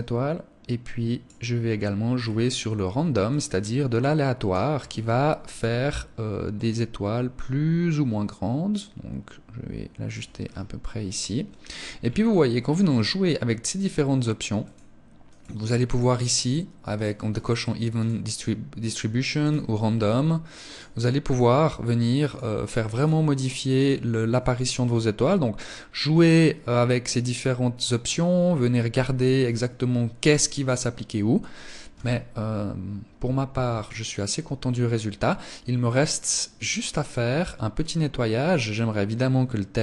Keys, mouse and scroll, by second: 1.0 scroll up 1, 1.5 scroll down 1, 2.5 scroll down 3, 2.6 click, 4.1-4.5 scroll up 3, 9.7 scroll down 4, 10.3 scroll up 2, 11.3-12.1 scroll up 8, 13.6 scroll up 3, 14.0 click, 14.6 click, 16.3 click, 16.7 click, 18.7 click, 20.1 click, 21.6 click, 22.3 click, 23.9 scroll down 2, 24.5-25.2 scroll down 4, 25.9 scroll down 2, 27.7 scroll down 2, 31.3 KP_0, 32.8 ctrl+s.